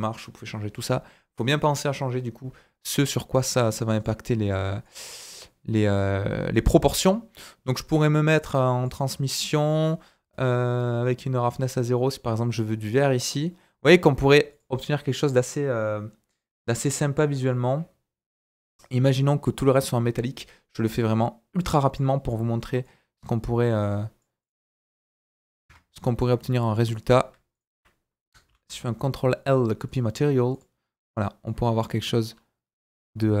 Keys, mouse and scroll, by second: 2.9 click, 4.0 click, 4.8-6.5 drag, 7.0-8.0 scroll down 3, 7.1 click, 7.1 middle click, 7.1 right click, 8.5 click, 12.9 middle click, 13.5-16.4 middle drag, 13.5-14.5 scroll up 1, 14.5 click, 16.4-17.4 drag, 17.4-21.6 middle drag, 19.0 click, 21.6-28.4 drag, 22.1-22.8 middle drag, 22.1-22.8 right drag, 22.1 typing, 28.4 ctrl+l, 30.5-31.4 drag, 31.4 middle click, 32.3-33.4 scroll up 2.